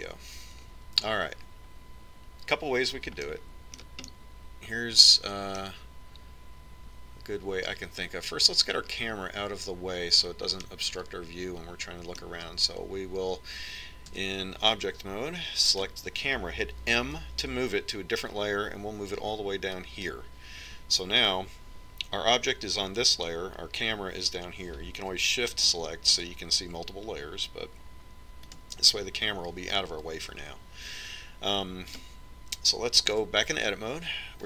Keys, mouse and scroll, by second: 2.1 Tab, 5.0-7.7 middle drag, 12.4-14.2 middle drag, 15.9 Tab, 17.5-19.1 right drag, 18.8 m, 19.1 right click, 27.4-29.1 drag, 30.3-32.3 drag, 33.8-34.4 right drag.